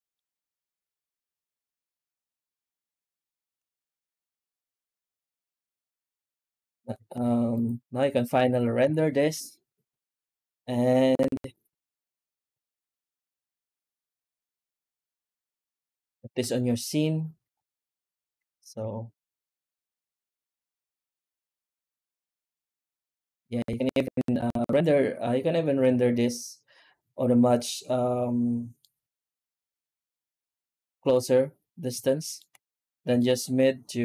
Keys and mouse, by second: 0.5 middle drag, 2.2-3.0 shift+middle drag, 3.0 shift+middle click, 6.8 z, 8.3 ctrl+s, 8.7 z, 14.4 z, 16.1 ctrl+s, 18.6 z, 23.9 z, 28.7-31.0 middle drag, 31.9 shift+middle click, 33.0 shift+middle drag, 33.2 shift+middle click.